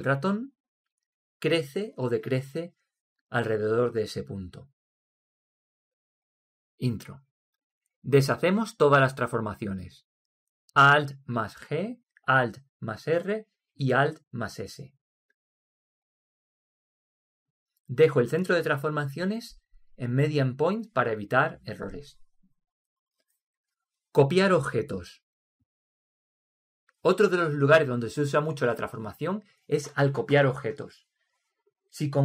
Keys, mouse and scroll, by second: 12.2 alt+g, 14.3 alt+r, 15.3 alt+s, 20.4-22.2 drag.